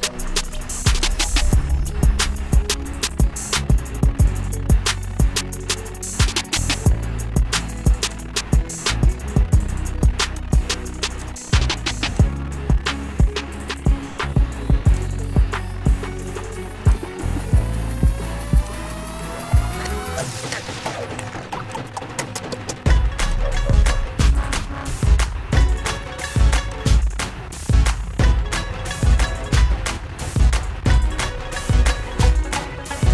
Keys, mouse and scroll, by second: 1.5 click, 1.8 click, 3.1 click, 8.5 click, 10.6 click, 11.6 click, 13.0 click, 15.1 click, 17.1 click, 19.0 click, 20.7 click, 22.0 click, 23.6 click, 24.8 click, 27.0 click, 31.2 click.